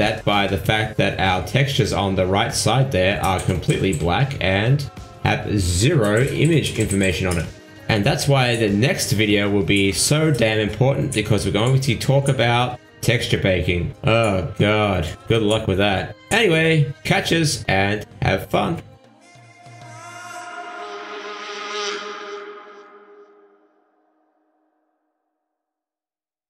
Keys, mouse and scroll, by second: 5.3 middle click, 6.6 click, 9.4 click, 11.2 middle click, 12.2 KP_Decimal, 13.4 click, 14.0-15.1 scroll down 9, 15.1 scroll down 2, 15.2 click, 16.3 click, 17.1 middle click, 17.7 middle click, 18.3-19.2 scroll down 3, 19.9 ctrl+s, 23.4-23.8 scroll up 4, 24.5 ctrl+s.